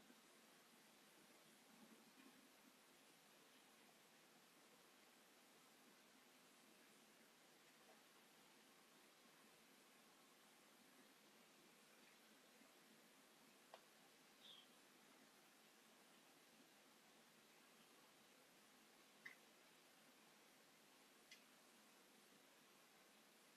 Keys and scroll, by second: 4.2 ctrl+z, 4.4 space, 4.7 s, 6.3 space, 8.7 space, 9.2 s, 11.5 space, 14.1 m, 15.5 space, 17.9 f, 18.7 5, 19.8 space, 21.0 Delete.